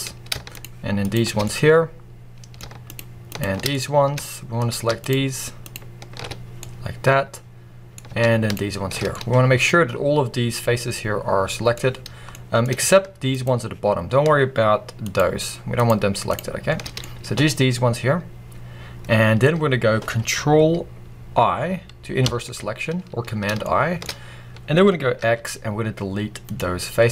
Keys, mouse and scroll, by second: 0.4 shift+click, 0.9 shift+click, 1.3-2.7 middle drag, 2.7 shift+click, 3.6-4.9 middle drag, 4.9 alt+shift+click, 6.5-8.4 middle drag, 8.4 alt+shift+click, 8.9 scroll down 1, 9.0-11.6 middle drag, 11.6-12.2 scroll up 1, 12.2-13.2 middle drag, 13.2-15.1 shift+drag, 15.6-16.7 shift+drag, 16.7 scroll down 1, 16.9-22.7 middle drag, 19.3 scroll up 1, 22.1 ctrl+i, 23.7-25.1 middle drag, 25.1 x, 26.8 scroll down 1.